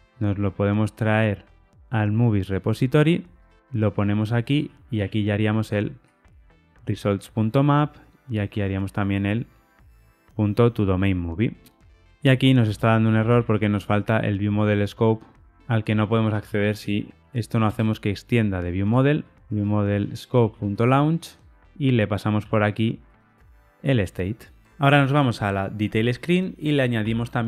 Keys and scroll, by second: 3.5 super+v, 5.7 Escape, 6.8 Tab, 9.0 Escape, 10.1 Tab, 17.6 Return, 18.7 Tab, 20.1 Return, 22.3 super+x, 23.1 super+v.